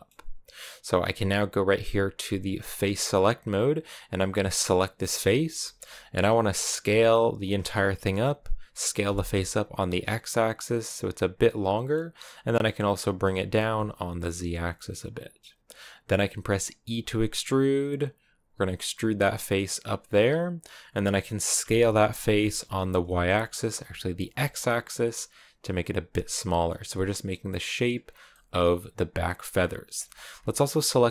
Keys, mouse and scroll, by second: 2.7-4.5 drag, 4.5 right click, 4.8 middle click, 5.1 scroll up 1, 5.2-6.6 shift+middle drag, 6.6 s, 12.1 g, 16.7 e, 20.7 middle click, 21.4 s, 27.8 scroll down 2, 28.1-29.4 middle drag, 29.4-29.9 scroll up 1, 29.9 shift+middle click, 30.1 scroll up 2.